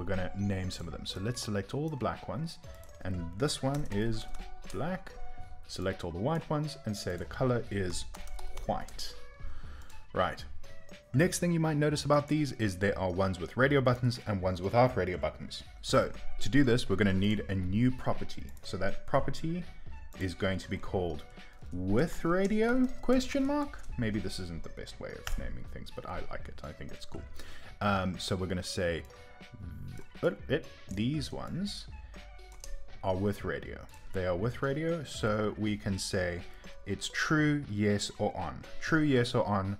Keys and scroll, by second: 2.6 typing, 27.1 Return.